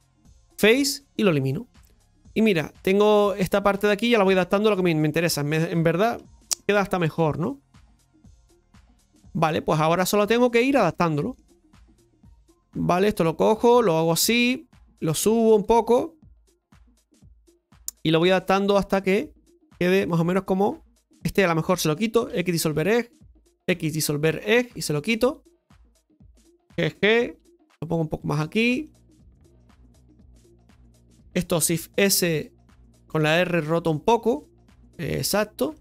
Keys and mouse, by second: 0.4 Delete, 1.8-6.1 middle drag, 6.1 KP_Divide, 7.6-9.9 middle drag, 10.9 shift+middle click, 12.2 shift+middle click, 13.5 right click, 13.9 alt+shift+right click, 15.0 click, 16.3 right click, 16.6 alt+shift+right click, 16.8 alt+shift+right click, 17.7 click, 19.2 click, 21.1 right click, 21.4 alt+shift+right click, 24.3 x, 25.4 right click, 25.7 alt+shift+right click, 25.9 alt+shift+right click, 28.8 g, 30.2 right click, 30.5 alt+shift+right click, 31.7 shift+s, 35.4 r.